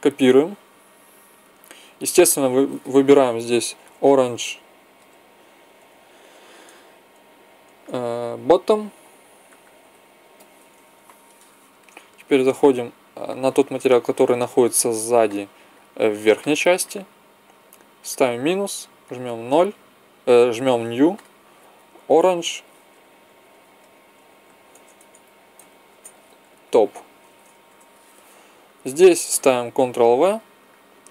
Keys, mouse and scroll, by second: 1.3 ctrl+c, 2.3-4.3 drag, 9.6 t, 12.3-13.3 drag, 13.3 middle click, 16.6 middle click, 18.0-20.8 drag, 21.2-25.7 drag, 30.2 ctrl+v.